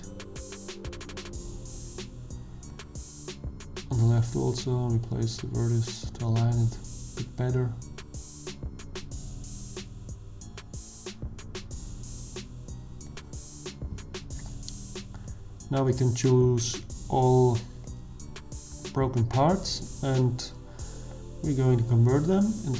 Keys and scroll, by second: 4.6 g, 7.8 g, 12.6 Tab.